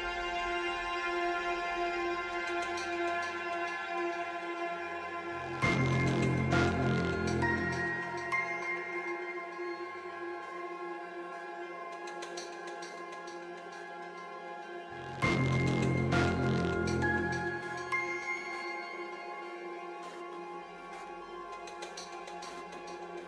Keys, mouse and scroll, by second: 0.2 Tab, 0.5 ctrl+middle click, 1.1 alt+click, 1.5 alt+shift+click, 2.0 alt+shift+click, 2.4 alt+shift+click, 2.9 click, 3.3 alt+shift+click, 4.1 shift+g, 5.4-6.6 ctrl+middle drag, 6.6 ctrl+b, 10.1 alt+s, 12.0 middle click, 12.3 scroll down 1, 12.4 ctrl+scroll, 12.6 Tab, 12.8 middle click, 13.7 click, 14.3 ctrl+1, 14.4 ctrl+2, 14.6 ctrl+3, 14.9 ctrl+middle click, 15.1 right click, 15.7-17.6 ctrl+middle drag, 17.6 click, 18.4 shift+click, 18.6 shift+click, 18.8 shift+click, 19.6 shift+click, 20.2 shift+g, 21.1 ctrl+middle click, 21.6 ctrl+i, 22.1 middle click, 23.0 click.